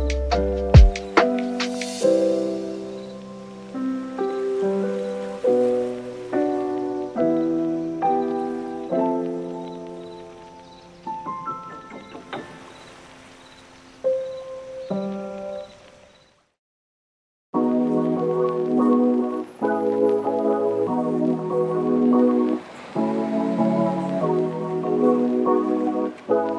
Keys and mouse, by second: 0.1 s, 0.9 click, 1.2 right click, 1.4 super+s, 1.5 click, 2.0 click, 3.1 middle click, 3.5 super+s, 3.9 middle click, 4.0 middle click, 4.6 super+s, 4.8 click, 5.3 shift+d, 7.0 right click, 7.9 middle click, 8.3 super+s, 8.5 right click, 9.3 right click, 10.5 super+s, 10.6 shift+middle click, 11.0 shift+d, 13.0 click, 13.2 super+s, 13.3 middle click, 13.6 middle click, 13.9 super+s, 14.0 click, 14.2 shift+middle click, 15.3 shift+Tab, 15.4 shift+click, 16.3 shift+middle click, 17.8 middle click, 20.7 Tab, 21.0 middle click, 21.7 super+s, 21.7 middle click, 22.3 middle click, 22.7 super+middle click, 23.1 super+s, 23.2 super+s, 24.1 super+s, 24.3 `, 24.8 n, 25.2 n, 25.9 middle click, 26.0 super+s, 26.4 click, 26.4 right click.